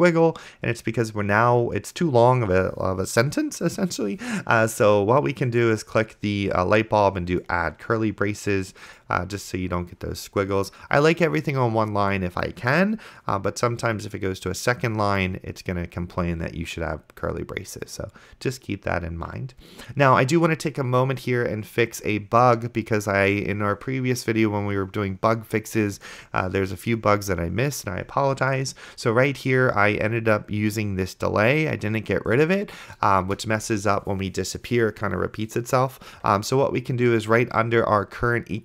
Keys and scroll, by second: 33.5 Return.